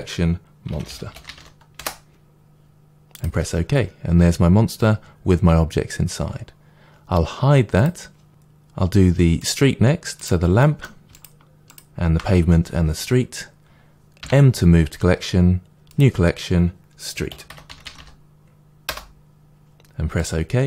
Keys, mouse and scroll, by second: 1.7 m, 7.7 click, 8.2-10.1 shift+middle drag, 10.1 click, 10.5-11.1 middle drag, 11.1 shift+click, 14.1 m, 17.8 e, 18.8 e.